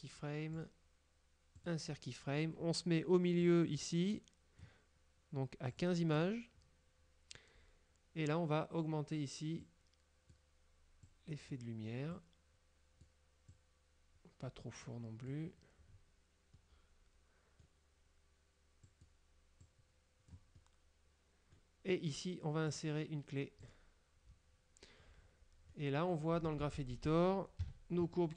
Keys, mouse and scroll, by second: 0.6 right click, 1.6 click, 3.5-4.9 drag, 5.9 click, 6.3 click, 9.7 click, 11.2 click, 12.3-13.4 drag, 13.6-15.6 drag, 16.0 scroll down 1, 16.7-17.9 middle drag, 18.9 click, 19.7 click, 20.6-21.8 middle drag, 22.8 right click, 23.7 click, 25.8 click, 26.7 a, 27.8 KP_Decimal.